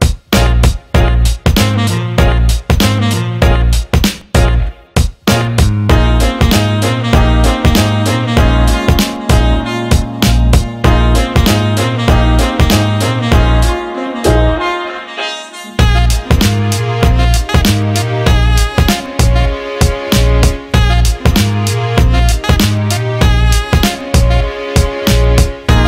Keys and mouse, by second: 0.5 g, 5.1-12.3 ctrl+middle drag, 12.3 s, 14.6 s, 16.5 g, 18.2-19.1 middle drag, 19.1 KP_3, 19.9-20.3 ctrl+KP_6, 21.1 shift+d, 24.1 KP_1, 25.6 shift+d.